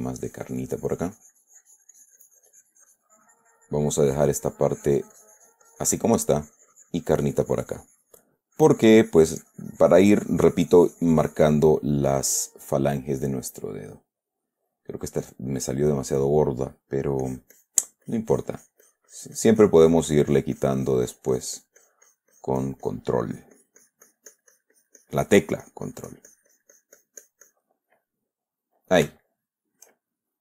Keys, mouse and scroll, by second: 6.7-12.9 drag, 13.0 middle click, 13.6-16.6 middle drag, 16.9 middle click, 17.6-23.5 drag, 23.6-28.1 drag, 28.2-29.6 middle drag, 29.6 shift+middle click.